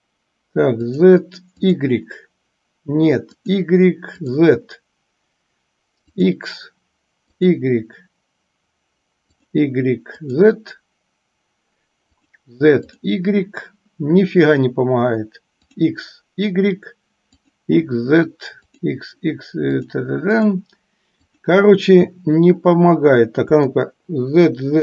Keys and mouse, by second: 1.9 click, 3.6 click, 4.3 click, 6.4 click, 9.6 click, 12.4 click, 15.8 click, 18.9 click, 20.0 click, 20.6 drag, 24.0-24.8 shift+middle drag.